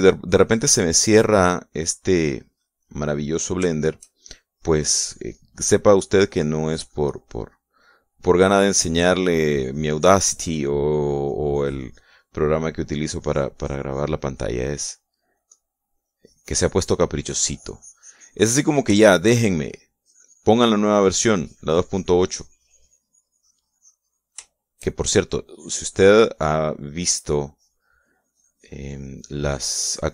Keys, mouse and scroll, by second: 1.2-4.2 drag, 4.3 shift+middle click, 4.9-12.8 shift+drag, 12.8 middle click, 13.6-19.5 drag, 19.6 shift+middle click, 20.6-25.1 shift+drag, 25.1 shift+middle click, 26.1-30.1 shift+drag.